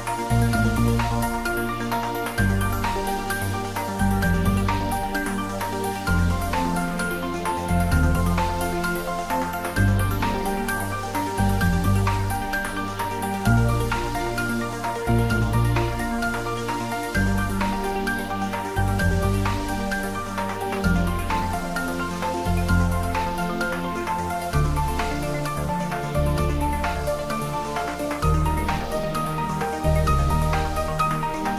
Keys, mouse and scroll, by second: 0.0 scroll down 1, 1.0 middle click, 2.1 click, 3.0 scroll up 1, 8.9 scroll down 1, 12.1 scroll, 12.3 scroll up 1, 13.3 click, 13.9 scroll up 1, 15.6 ctrl+3, 15.8 scroll up 1, 18.1 Tab, 19.1 ctrl+r, 20.2 click, 23.6 ctrl+r, 25.0 click, 27.3 ctrl+r, 28.2 click, 30.0 ctrl+r, 30.6 click.